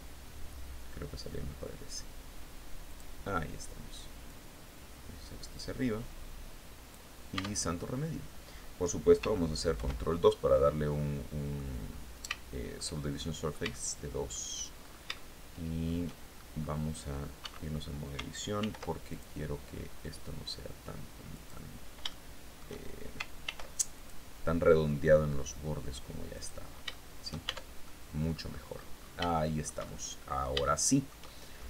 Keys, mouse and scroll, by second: 2.3 click, 3.7-6.5 drag, 6.8 Tab, 9.2 ctrl+2, 10.4 click, 11.3 scroll down 2, 11.7-13.9 shift+middle drag, 14.2-14.5 shift+scroll up 2, 14.6 shift+middle click, 15.8 shift+scroll up 2, 16.9 Tab, 18.0 ctrl+r, 18.5 ctrl+click, 20.8 click, 21.5 shift+middle click, 22.9 ctrl+r, 23.4 ctrl+click, 25.8 click, 26.3 shift+click, 26.9 shift+Tab, 27.3 shift+click, 27.9-28.6 scroll down 2, 28.6 shift+scroll down 1, 28.7-30.0 shift+middle drag, 30.1-31.2 shift+middle drag, 31.3-31.6 shift+scroll up 1.